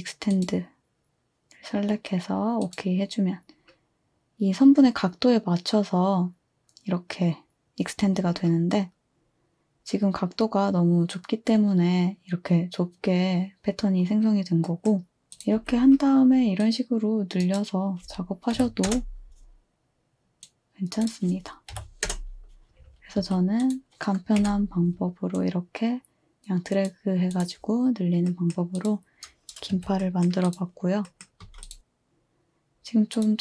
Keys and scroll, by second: 15.2 Delete, 15.6 Delete, 18.6 typing, 21.7 3, 23.2-23.9 typing, 24.4 Delete, 29.7 2, 31.4 z.